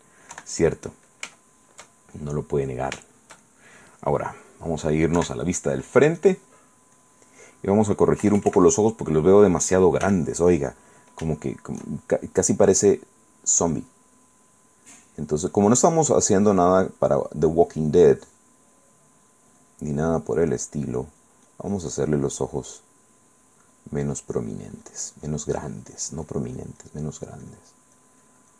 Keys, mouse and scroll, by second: 0.5 KP_1, 1.6-4.2 shift+middle drag, 5.4 KP_1, 6.4 click, 7.2 click, 8.4 KP_Add, 10.2 f, 10.8 click, 11.6 shift+middle click, 14.0 click, 15.2 click, 16.5 click, 17.2 click, 18.0 click, 18.4 click, 18.9 click, 19.4 click, 19.8 click, 20.2 click, 22.5 click, 23.1 click, 23.5-26.7 drag, 26.8-27.9 drag, 28.2 click.